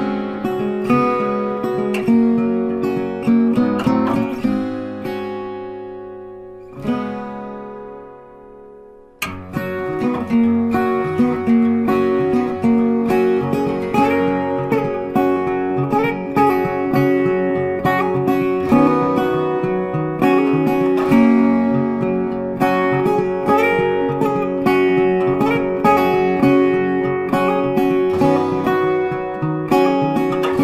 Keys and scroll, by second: 12.3 ctrl+t.